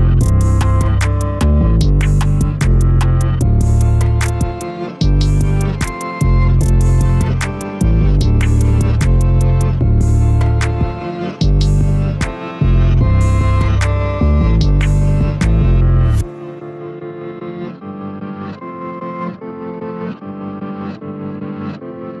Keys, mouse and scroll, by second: 1.0 g, 4.6 a, 7.0-8.0 shift+middle drag, 8.0-8.9 scroll up 1, 8.9-9.6 shift+middle drag, 9.6-10.5 scroll up 1, 10.5-12.1 shift+middle drag, 12.1-15.1 scroll down 1, 16.0 click, 17.8-22.2 drag.